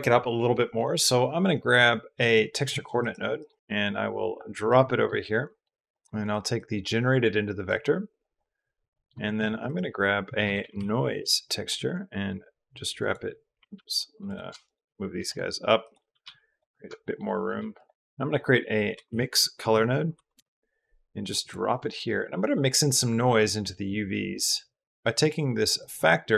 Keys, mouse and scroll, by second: 2.0 click, 2.5 shift+a, 4.7 click, 5.3 click, 6.4-7.5 drag, 8.0 drag, 8.7 click, 9.0 shift+a, 13.7 ctrl+z, 14.4 shift+click, 15.1 shift+click, 15.6 shift+click, 16.0 g, 17.4 g, 17.7 click, 17.9 shift+a, 21.7 shift+click, 22.3 click, 24.2 middle click, 24.8 click, 25.0 click, 25.6-26.3 drag.